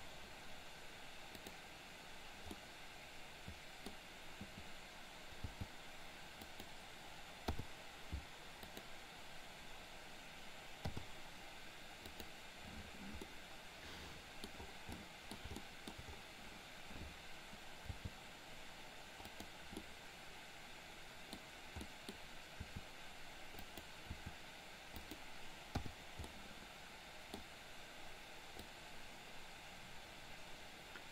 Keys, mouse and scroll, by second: 1.4 click, 2.5-3.9 middle drag, 5.5 g, 7.5 i, 8.8 click, 11.0 i, 12.2 click, 13.3-14.4 middle drag, 15.0-15.4 middle drag, 15.7 shift+middle click, 17.9 g, 19.9-21.3 middle drag, 21.9 middle click, 22.0 scroll down 1, 22.8 r, 24.0 r, 25.8 i, 26.3-27.3 middle drag, 28.7-31.1 drag.